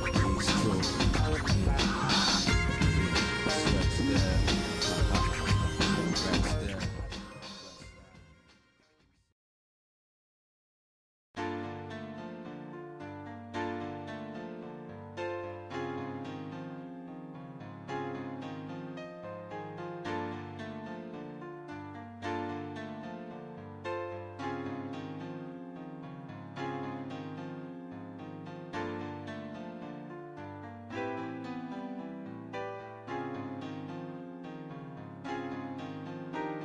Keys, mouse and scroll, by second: 0.2 shift+click, 0.7 middle click, 1.4 shift+click, 3.5 space, 5.8 shift+middle click, 6.5 middle click, 7.0 scroll down 1, 7.0 scroll up 1, 7.2 scroll down 1, 7.4 shift+middle click, 7.8 middle click, 8.3 middle click, 8.7 middle click, 9.1 middle click, 9.8 scroll up 1, 10.4 scroll up 2, 10.7 click, 11.1-14.1 shift+middle drag, 14.8 click, 15.3 scroll up 1, 15.9 scroll up 1, 16.1 scroll down 1, 18.7 g, 26.0-35.4 shift+middle drag.